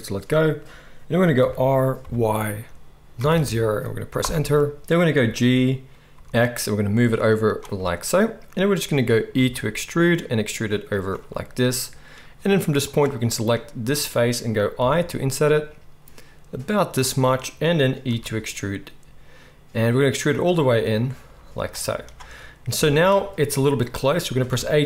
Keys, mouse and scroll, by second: 1.3 r, 5.1 g, 7.5 click, 7.6-24.2 middle drag, 9.3 e, 14.8 i, 18.0 e, 21.2 z, 22.7 KP_1, 24.5 a.